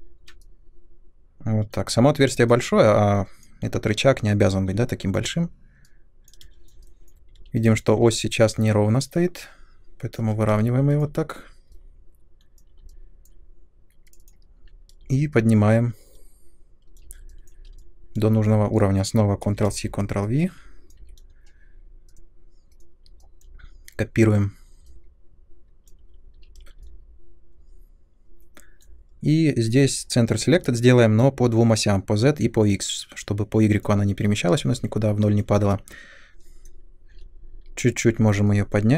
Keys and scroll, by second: 6.4 space, 6.5 ctrl+z, 7.3 r, 10.5 space, 14.5 w, 19.4 ctrl+c, 19.6 ctrl+v, 20.9 e, 26.3 w, 36.3 ctrl+z, 37.0 w.